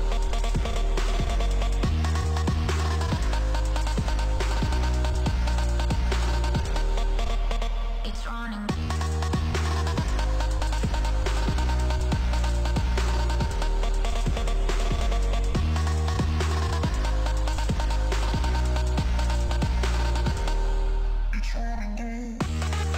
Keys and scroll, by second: 2.4 5, 4.9 2, 5.5 Delete, 8.7 ctrl+s, 15.1 ctrl+s, 16.5 F4.